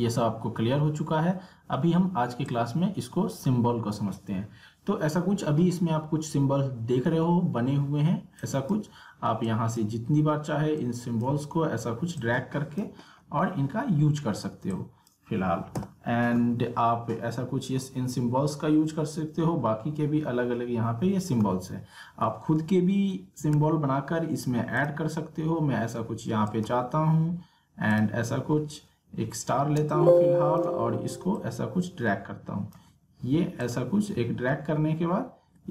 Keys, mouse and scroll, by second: 2.5-8.4 drag, 8.4-13.4 drag, 13.4-14.0 alt+scroll up 2, 14.0-14.3 alt+scroll down 2, 14.7-17.4 drag, 17.4-18.0 alt+scroll up 2, 18.0-19.4 alt+scroll down 2, 19.4-19.8 scroll down 1, 22.4 alt+Num_Lock, 22.4 alt+scroll down 1, 22.7-23.1 alt+scroll up 1, 23.2 scroll down 1, 24.8 click, 26.5 right click, 27.9 click, 28.9 alt+scroll down 1, 29.8 space, 29.9 click, 30.3 space, 31.3-33.6 drag, 34.2 alt+scroll up 1, 34.6 alt+scroll down 1, 35.2 alt+scroll up 1.